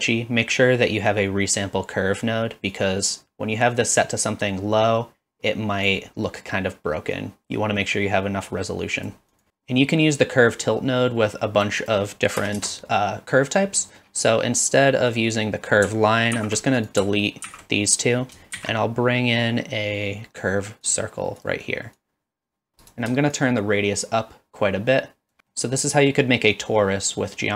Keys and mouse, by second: 2.7-5.9 drag, 7.1-9.1 drag, 9.3-11.7 drag, 11.9-12.9 drag, 13.9 middle drag, 15.1 click, 16.3 ctrl+x, 18.6 shift+a, 22.0 click, 23.3-25.4 shift+drag, 25.5-27.3 middle drag.